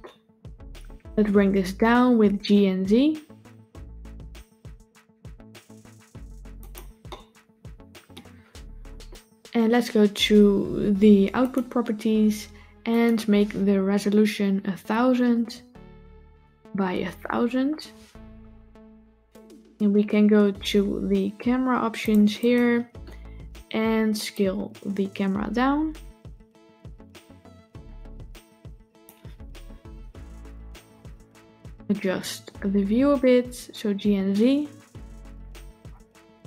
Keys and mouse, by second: 1.7 g, 6.9-8.0 shift+middle drag, 12.8-21.9 drag, 15.3 KP_0, 17.1 KP_0, 24.3-28.9 drag, 30.7 g.